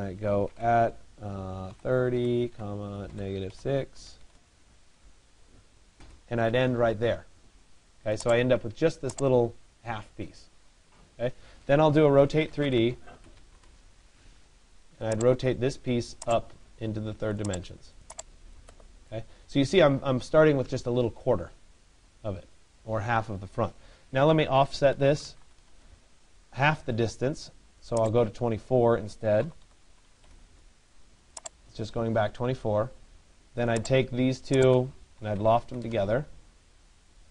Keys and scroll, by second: 4.0 Return, 13.1 d, 25.3 Return, 35.5 Return.